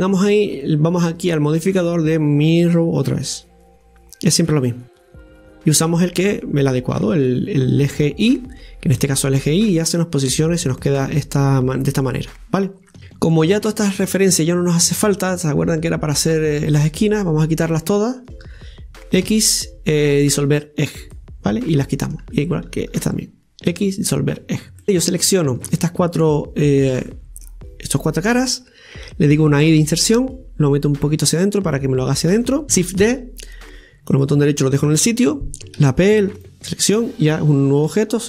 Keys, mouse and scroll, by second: 0.5-3.5 drag, 5.8 click, 6.3 click, 9.0-10.4 middle drag, 10.4-10.8 scroll down 2, 10.8-14.2 middle drag, 14.2-19.2 right drag, 19.3 x, 21.8 middle click, 22.9 alt+shift+right click, 23.7 x, 24.8 middle click, 25.1-27.1 right drag, 25.1 click, 27.1-29.4 middle drag, 31.7 middle click, 35.8 p, 37.9 Tab.